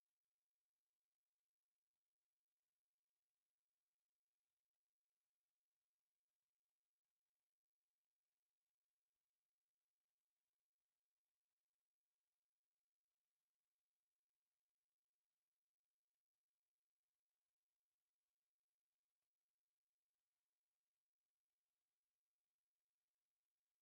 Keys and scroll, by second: 0.4 6, 0.9 Escape, 1.6 c, 1.9 space, 2.8 F8, 3.6 Escape, 3.7 e, 4.1 space, 4.5 d, 5.1 o, 7.6 v, 7.6 Escape, 8.0 e, 8.4 space, 10.3 e, 10.4 space, 10.9 Escape, 11.0 e, 11.2 space, 11.7 Escape, 13.7 m, 13.8 space, 14.6 Escape, 15.6 e, 16.5 Return, 16.8 F8, 17.5 Escape, 17.7-20.4 typing.